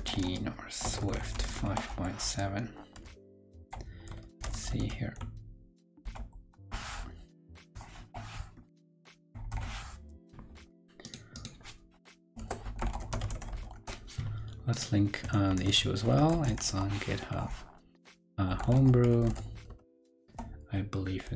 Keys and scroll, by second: 15.4 super+t.